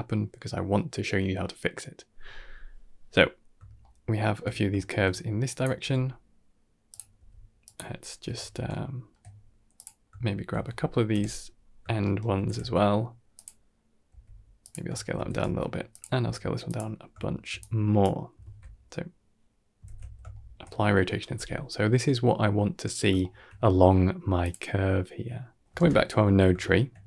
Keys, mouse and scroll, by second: 3.4 scroll down 1, 3.7 shift+middle click, 4.6 shift+middle click, 5.3 click, 5.7 g, 7.0 s, 7.8 scroll down 1, 8.1 Tab, 8.4 scroll down 2, 8.6-9.2 shift+middle drag, 9.2-9.6 scroll up 2, 9.6 click, 9.9 middle drag, 11.0 KP_7, 11.9 shift+middle drag, 12.2 shift+d, 13.9 s, 14.8 shift+middle click, 15.0 shift+d, 16.1 s, 16.8 scroll down 1, 17.1 shift+middle drag, 17.4-18.1 drag, 18.3 ctrl+a, 19.7 ctrl+s, 20.4 shift+middle click, 23.1 shift+middle drag, 24.3-24.9 drag, 24.9 middle click, 25.7 ctrl+space, 25.7 click, 26.5 shift+middle drag, 26.9 scroll up 2.